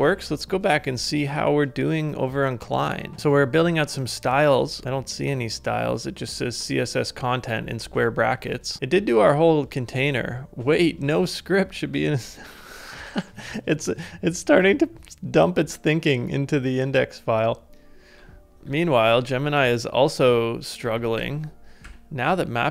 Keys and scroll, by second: 17.7 super+Tab, 18.5 ctrl+z, 18.5 ctrl+k, 18.5 ctrl+a, 20.8 ctrl+a, 21.8 ctrl+u.